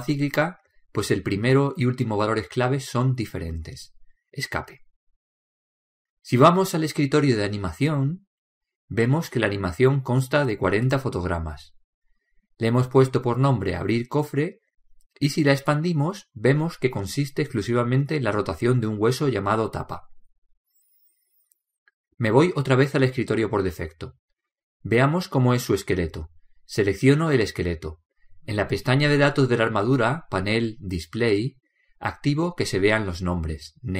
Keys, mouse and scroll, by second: 6.0 Escape, 7.9-9.6 drag, 14.2 click, 24.5 click, 28.0-30.1 right drag, 31.0-33.8 middle drag.